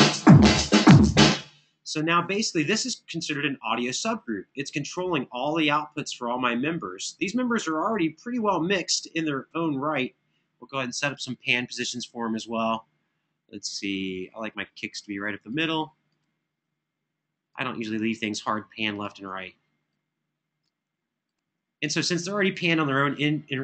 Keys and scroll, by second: 1.0 space.